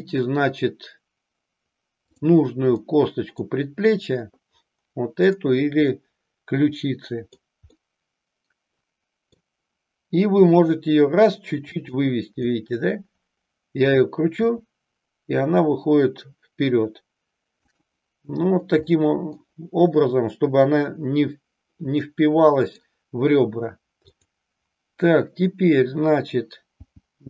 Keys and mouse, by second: 2.9 middle click, 5.2-7.1 drag, 7.4 middle click, 7.9-9.4 middle drag, 10.4 r, 11.9 click, 14.5 r, 17.7 click, 19.0 middle click, 22.1 middle click, 26.7 g.